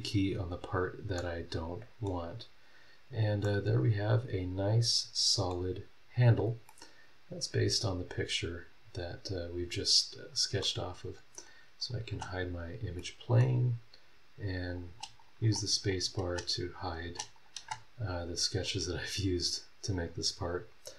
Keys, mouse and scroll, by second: 1.1-2.2 middle drag, 1.2 click, 2.3 scroll down 2, 2.8 scroll up 2, 3.4-5.7 middle drag, 3.5-5.7 drag, 6.1-6.6 scroll up 2, 6.6-8.1 middle drag, 6.8 click, 8.1-10.8 right drag, 10.8 middle click, 11.0-11.5 scroll up 2, 11.5 middle click, 11.8 click, 12.1 middle click, 12.1 space, 12.5 scroll down 2, 12.9 middle click, 13.4 scroll up 1, 13.9 scroll down 1, 14.7 click, 14.8 space, 15.2 click, 15.8 click, 16.2 space, 16.7 click, 17.0 space, 17.3 click, 18.5 scroll down 2, 20.8 scroll up 2.